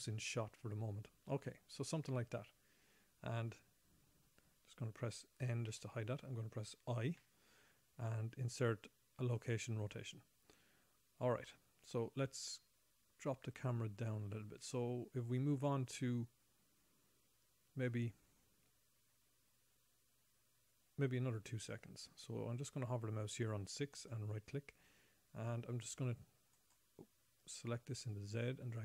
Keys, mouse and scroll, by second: 6.1 n, 7.6 i, 11.4-11.8 scroll down 1, 11.8 middle click, 24.3 right click, 25.9 click, 26.1 click, 27.8 click.